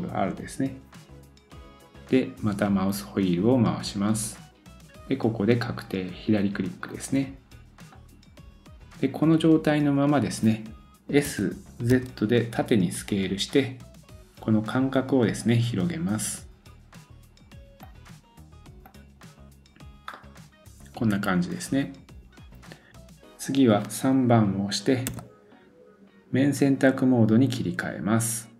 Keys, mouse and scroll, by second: 0.1 ctrl+r, 18.8 click, 20.1 middle click.